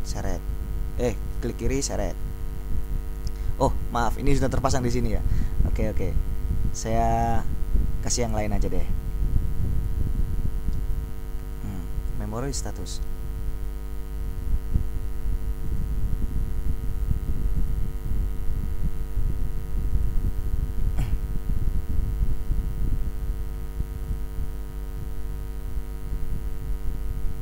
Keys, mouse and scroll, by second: 6.0-6.5 scroll down 2, 6.8-9.1 scroll down 2, 9.8-11.8 scroll down 2, 12.2-13.8 drag, 15.8 click, 17.7 click, 20.1 click, 22.0-23.0 scroll down 2, 24.3 click.